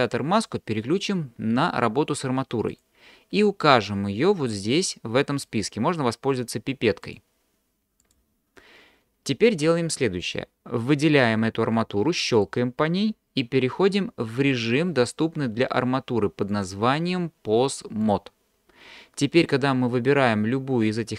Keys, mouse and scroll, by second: 2.7 click, 7.0-8.2 drag, 16.5-18.1 drag.